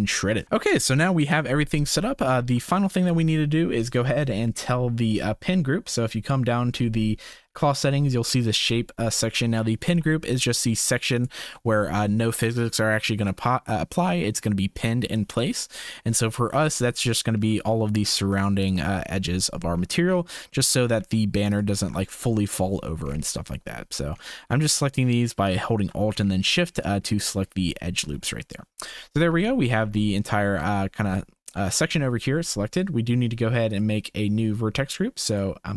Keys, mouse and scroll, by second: 2.2 shift+middle click, 9.8 2, 11.1 alt+click, 17.1 shift+click, 18.6 alt+shift+click, 19.5 shift+click, 20.5 shift+click, 23.6 shift+click, 25.4 alt+shift+middle click, 26.8 shift+click, 29.5 shift+middle click, 33.6 click, 35.2 click.